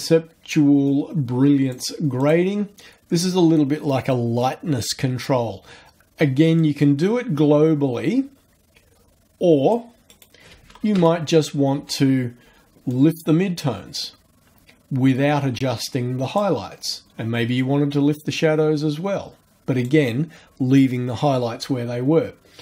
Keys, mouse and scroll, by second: 0.9 click, 2.2 click, 6.6-9.9 drag, 10.1 right click, 10.8 KP_0, 10.9 KP_Enter, 12.9-16.5 drag, 17.6-20.0 drag.